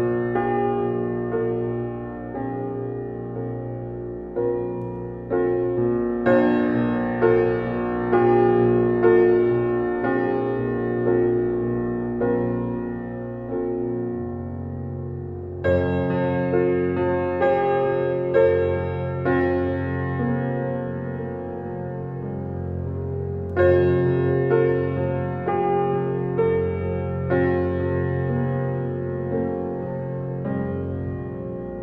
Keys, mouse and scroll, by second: 6.5 click, 6.7 Escape, 9.5 click, 10.9 alt+middle click, 12.0 alt+right click, 12.9 alt+click, 14.2 Delete, 14.7 scroll up 1, 15.5 click, 16.8 right click, 18.0 click, 20.3-23.0 drag, 26.6 alt+right click, 26.9 alt+click, 27.4 alt+right click, 28.9 click, 31.6-31.8 scroll down 1.